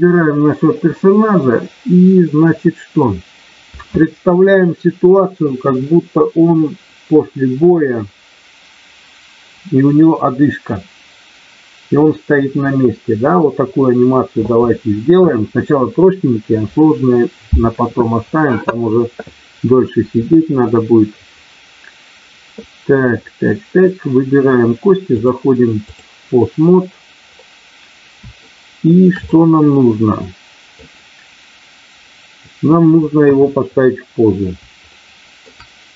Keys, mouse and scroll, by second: 25.1 click, 28.4 shift+middle click, 29.3-30.8 middle drag, 33.2 KP_1, 34.8 middle click.